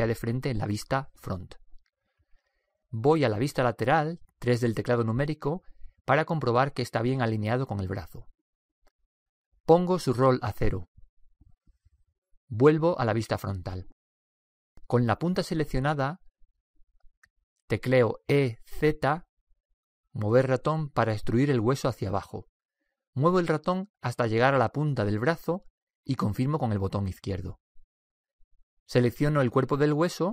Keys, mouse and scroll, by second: 4.5 KP_3, 10.3-12.1 drag, 14.1 KP_1, 18.6 e, 29.6-30.3 right drag.